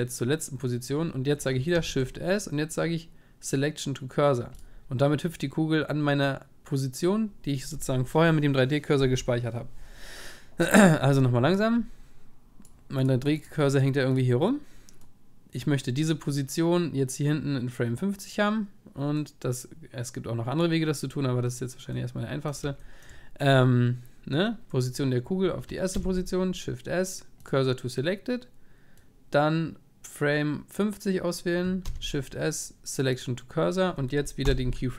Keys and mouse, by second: 1.7 shift+s, 22.0-24.8 middle drag, 25.9 shift+s, 31.9 shift+s.